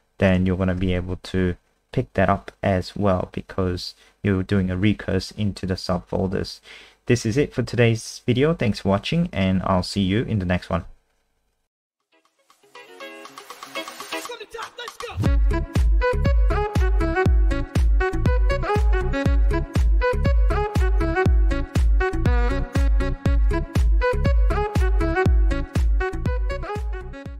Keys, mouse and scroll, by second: 0.3 click, 0.8 F5.